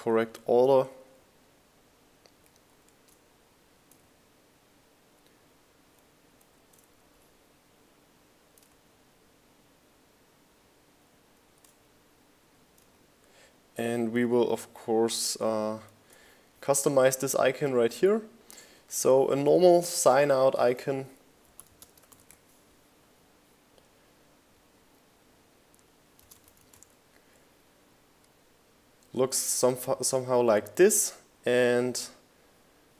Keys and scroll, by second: 0.4 shift+Down, 0.8 Up, 2.7 shift+Down, 7.0 shift+Down, 14.9 super+t, 15.1-16.6 typing, 20.1-20.9 typing.